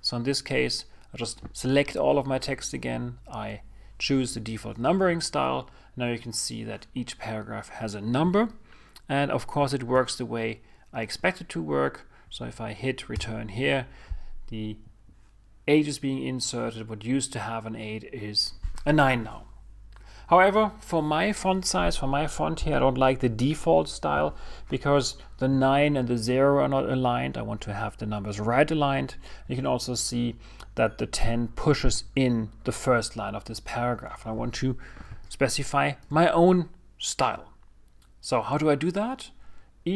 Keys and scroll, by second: 15.1 Return.